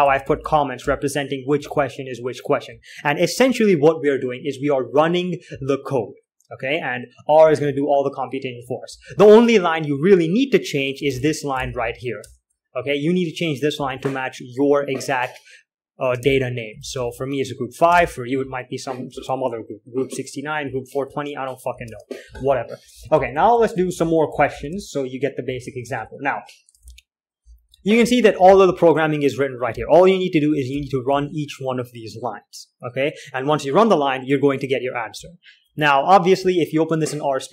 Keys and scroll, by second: 0.0-2.5 typing, 7.9-10.2 typing, 11.4-12.6 typing, 14.3 shift+v, 16.3-21.5 typing, 22.2 alt+Tab, 23.4-26.2 typing, 27.1 alt+Tab, 27.5-31.4 typing, 35.5 j, 35.7 j, 36.9 k, 37.0 k.